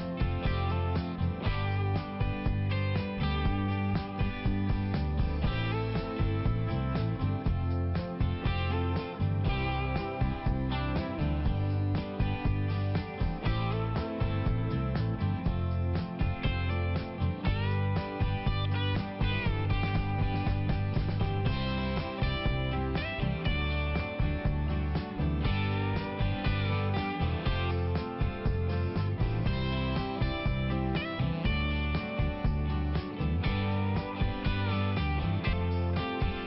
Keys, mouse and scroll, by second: 0.1 click, 1.1 click, 3.3 click, 4.5 click, 7.6 click, 10.1 click, 10.3 click, 10.5 click, 12.4 click, 16.3 click, 16.4 click, 19.5 click, 20.5 click, 24.7 click, 25.0 click, 25.3 click, 26.8 click, 27.6 click, 30.0 click, 30.1 click, 30.1 click, 30.3 double click, 32.3 click, 32.5 click, 32.6 double click, 34.7 click, 34.9 click.